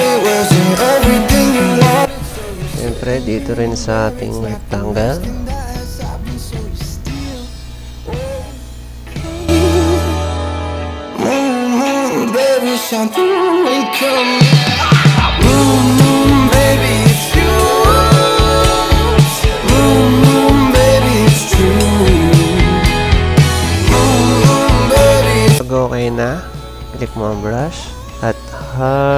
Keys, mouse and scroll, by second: 0.3 click, 1.1 click, 2.1 ctrl+z, 2.6 click, 3.8 click, 5.9 click, 6.8 click, 8.7 click, 9.9 click, 10.6 click, 11.4 click, 11.7 click, 12.8 click, 15.3 click, 16.8 click, 21.5 ctrl+z, 23.4 ctrl+z, 23.4 click, 23.9 typing.